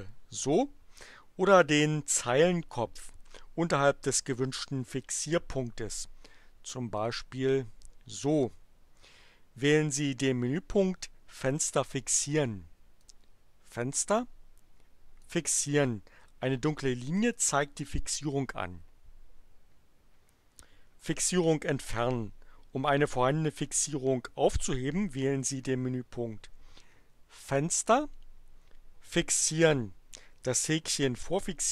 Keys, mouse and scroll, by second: 7.0 click, 13.0 click, 15.2 click, 27.5 click.